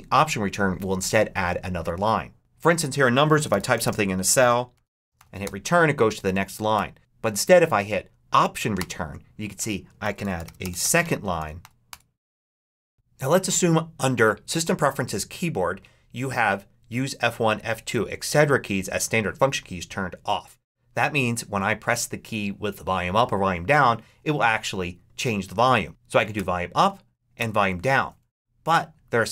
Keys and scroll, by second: 2.4 super+BackSpace, 2.9-5.5 typing, 6.2 Up, 6.6 BackSpace, 8.6 alt+Return, 9.9 alt+shift+s, 10.0-12.5 typing.